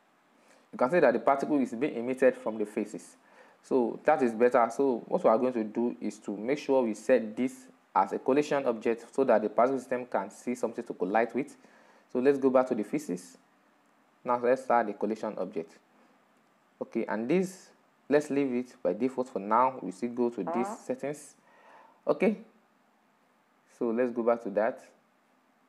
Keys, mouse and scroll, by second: 1.3-1.9 drag, 1.9-2.8 middle drag, 2.8-3.4 scroll up 4, 3.4-3.9 scroll down 4, 3.9-7.5 middle drag, 7.5 right click, 15.3-22.2 drag, 22.2-24.9 middle drag, 24.9 right click.